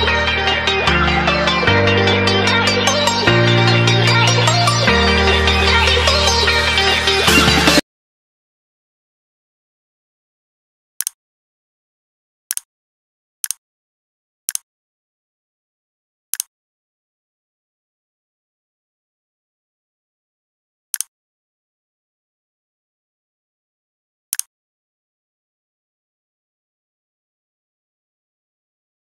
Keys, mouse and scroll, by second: 1.7 c, 2.4 click, 3.8 v, 4.1 v, 4.5 click.